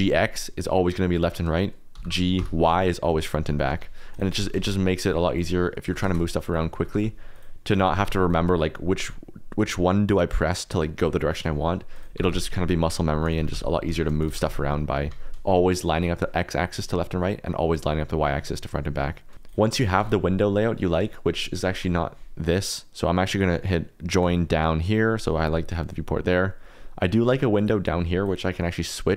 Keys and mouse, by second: 1.2 Escape, 1.9 g, 2.3 y, 3.7 Escape, 4.1 click, 4.3 g, 4.5 shift+z, 5.0 click, 5.3 click, 5.8-8.0 typing, 6.4 click, 7.3 click, 7.7 click, 8.2 click, 11.9 click, 12.1 g, 12.3 x, 12.9 Escape, 13.2 click, 13.3 g, 13.5 x, 13.8 Escape, 14.1 click, 14.2 g, 14.4 y, 15.0 Escape, 19.4 shift+middle click, 19.7 shift+middle click, 19.9 x, 23.3 right click, 23.8 click, 27.5 click, 27.8 click.